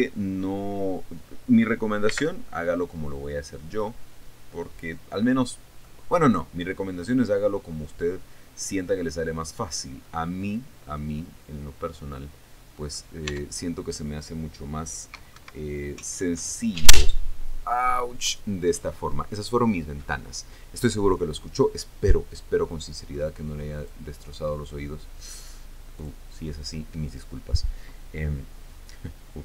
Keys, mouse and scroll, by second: 2.7 c, 4.5 middle click, 6.5-7.5 middle drag, 8.7 middle click, 10.7-11.7 middle drag, 12.7-13.7 middle drag, 13.9 Tab, 15.9 Escape, 24.4 click, 26.5 click.